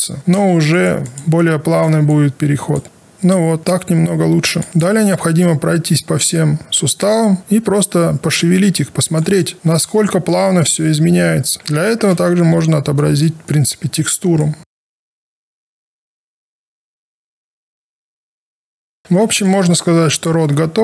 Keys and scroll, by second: 12.0 5, 19.1 ctrl+alt+r.